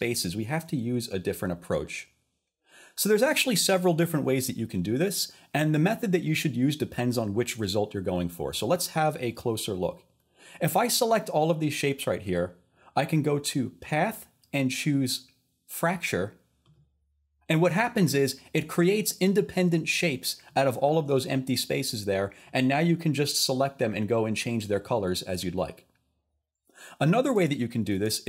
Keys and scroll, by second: 22.8-23.5 typing, 27.4 super+z, 27.9 super+z.